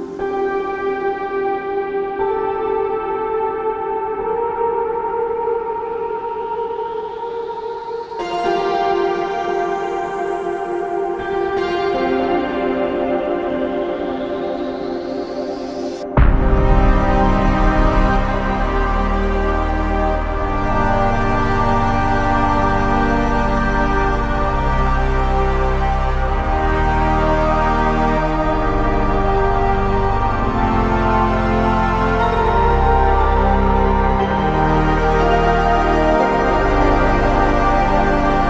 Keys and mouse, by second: 0.0 double click, 10.7 shift+click, 12.8 shift+click, 15.1 alt+click, 18.9 double click, 21.1 shift+click, 23.0 double click, 25.7 alt+click, 26.6 alt+shift+click, 27.6 ctrl+alt+click, 33.7 double click, 36.7 shift+click.